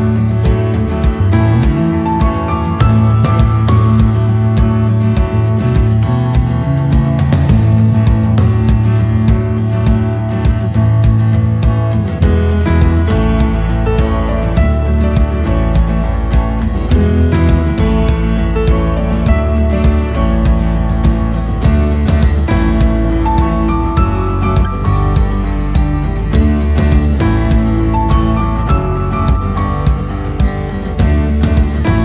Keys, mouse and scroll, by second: 0.6 click, 0.9 middle click, 2.6 alt+e, 6.0 alt+e, 8.8 scroll down 1, 9.0 middle click, 9.6 click, 9.8 middle click, 11.4 click, 11.7 middle click, 13.8 middle click.